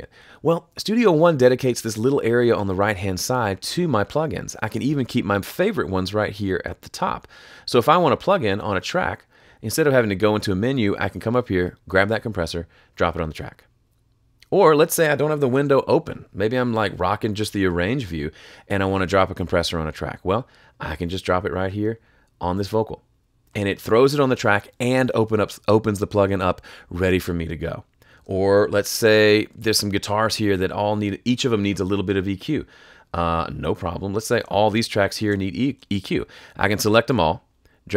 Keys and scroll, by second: 15.5 F3, 29.5 F3.